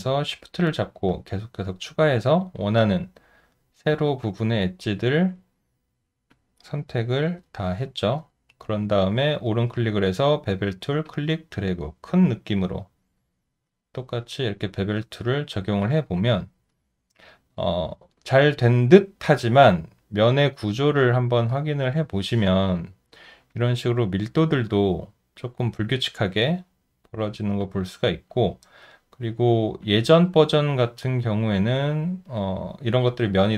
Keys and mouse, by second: 0.2 alt+middle click, 1.1 alt+click, 3.1 alt+right click, 4.8 alt+right click, 5.7 alt+middle click, 6.3 alt+click, 8.2 alt+right click, 8.5 alt+middle click, 15.8 alt+click, 16.7 alt+right click, 18.3 alt+middle click, 19.2 alt+click, 22.6 alt+right click, 27.6 alt+click, 29.2 alt+middle click, 29.8 alt+click.